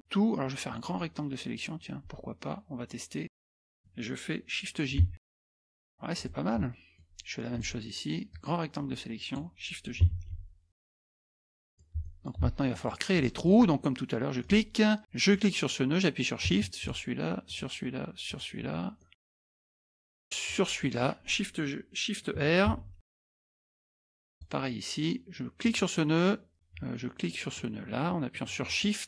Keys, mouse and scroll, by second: 5.1 shift+j, 5.5 click, 6.2-7.5 scroll down 1, 7.5 click, 8.3-9.6 drag, 10.2 shift+j, 10.7 click, 11.5 scroll up 1, 11.6 scroll down 1, 11.7-12.4 scroll up 3, 11.9 middle click, 12.4 middle click, 12.7-13.9 middle drag, 14.4 click, 15.3 click, 16.8 shift+click, 17.5 shift+click, 18.3 shift+click, 19.0-19.4 scroll down 6, 19.1 middle click, 19.3 middle click, 19.4 middle click, 20.5 shift+click, 22.7 shift+r, 23.3-23.7 scroll up 2, 23.7 click, 24.3 click, 25.6 click, 28.7 shift+click.